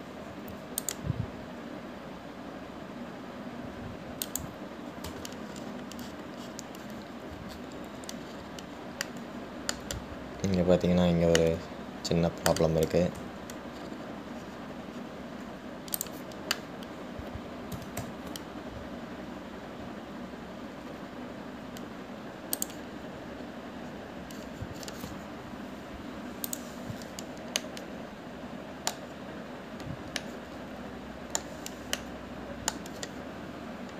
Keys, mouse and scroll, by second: 1.5 ctrl+r, 6.7-7.0 scroll down 2, 7.7-8.5 scroll down 11, 9.4-10.2 scroll up 5, 10.2-14.5 middle drag, 14.5 Tab, 15.0-15.7 scroll up 6, 15.7-16.3 scroll down 3, 17.2 click, 24.5-25.2 scroll up 2, 25.2-27.7 scroll down 1, 27.7-28.9 drag, 28.9-30.4 middle drag, 30.4-30.9 scroll down 2, 31.5-33.9 middle drag.